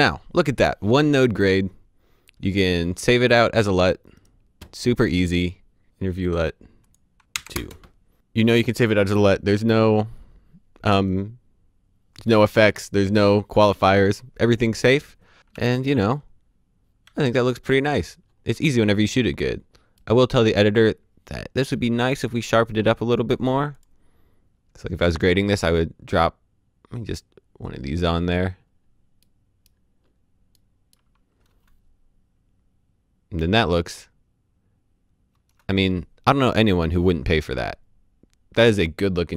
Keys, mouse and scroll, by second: 3.2 click, 4.1 right click, 5.1 click, 5.7 click, 5.9-7.5 typing, 6.2 click, 7.5 KP_Enter, 15.4 d, 15.9 d, 17.0 d, 17.2 d, 17.9-18.6 scroll up 1, 23.7 click, 24.9-25.4 scroll down 1, 26.7 scroll up 1, 27.2-28.6 scroll down 1, 28.7 scroll down 1, 29.1 middle click, 29.7 scroll down 1, 30.5 middle click, 31.4 space, 35.3 space, 37.5 click.